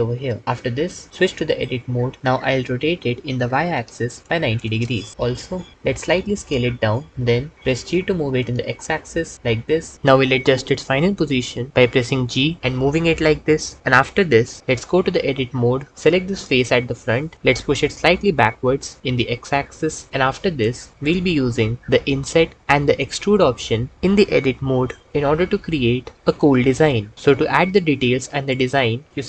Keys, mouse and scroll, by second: 1.6 Tab, 3.1 r, 3.6 y, 4.2 KP_9, 4.5 KP_0, 5.9 s, 7.1 Tab, 7.7 g, 8.2 x, 15.6 Tab, 17.3 g, 17.6 x, 29.1 g.